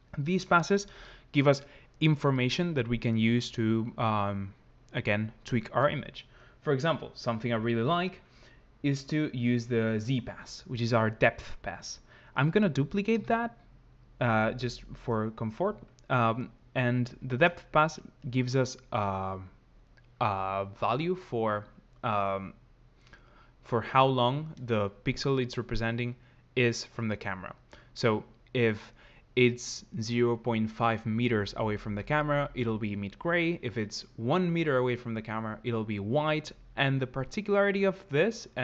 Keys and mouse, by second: 13.1 shift+d, 14.6 click, 17.7 ctrl+shift+click.